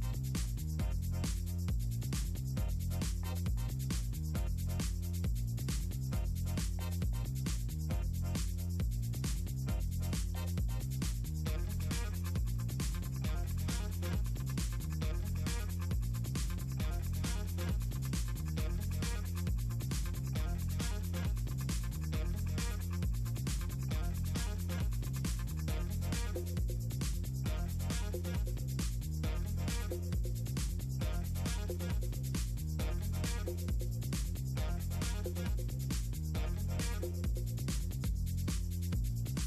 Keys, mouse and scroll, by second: 0.5 middle click, 1.1 middle click, 1.7 middle click, 2.3 middle click, 3.7 click, 8.1 click, 9.8 middle drag, 10.8 middle click, 11.0-11.4 scroll up 2, 12.2 click, 14.5 middle click, 14.7-15.5 scroll up 2, 15.9-17.9 drag, 18.3 middle click, 20.7-25.0 drag, 25.3 middle drag, 26.3 middle click, 26.9 middle click, 27.5 middle click, 28.7 middle click, 29.3 middle click, 30.0 middle click, 31.9 click, 37.5 middle click, 37.7 scroll up 2, 38.2-38.6 scroll down 2, 38.6 middle click, 38.8 scroll up 2, 39.3 middle click.